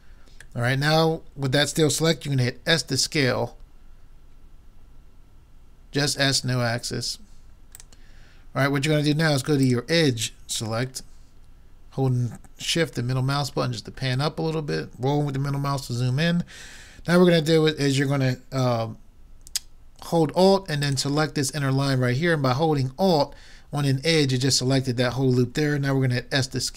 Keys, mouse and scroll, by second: 0.7-2.4 middle drag, 2.5 s, 7.8-9.5 drag, 9.7-11.3 drag, 11.1-13.1 middle drag, 11.3 right click, 13.5-15.9 middle drag, 19.5 middle click, 20.5 middle click, 20.9-22.6 drag, 26.1 s.